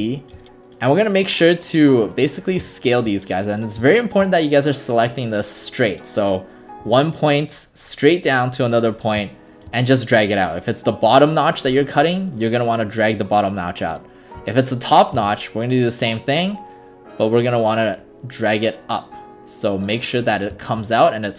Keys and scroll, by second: 15.2 space.